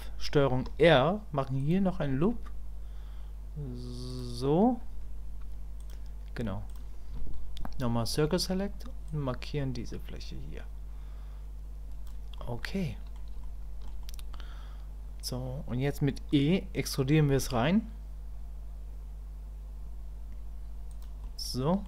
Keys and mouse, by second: 5.8 click, 12.4 middle click, 13.4 shift+middle click, 14.0 middle click, 21.2 click.